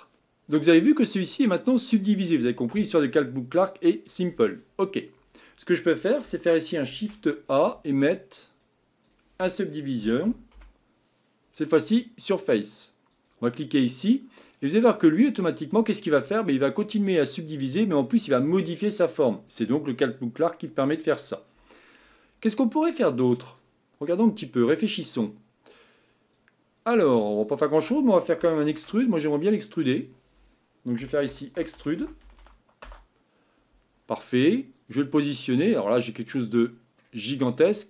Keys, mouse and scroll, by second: 0.1 scroll down 2, 0.4-0.9 scroll up 1, 0.9-12.3 middle drag, 14.8-15.9 scroll up 4, 15.9-17.0 scroll down 2, 35.7-36.6 scroll down 7, 36.6 middle click, 37.2-37.8 scroll up 6.